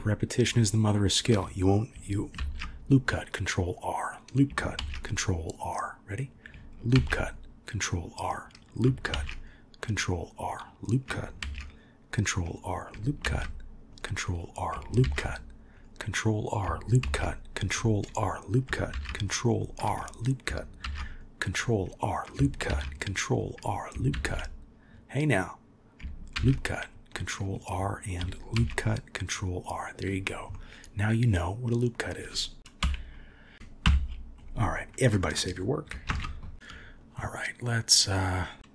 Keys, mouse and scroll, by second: 0.5-0.9 drag, 2.4 ctrl+r, 4.8 ctrl+r, 6.9 ctrl+r, 9.1 ctrl+r, 11.4 ctrl+r, 15.0 ctrl+r, 17.0 ctrl+r, 18.9 ctrl+r, 26.6 ctrl+r, 28.5 ctrl+r, 30.5-32.1 middle drag, 32.8 KP_1, 33.8 KP_1, 36.1 ctrl+s, 37.9 click.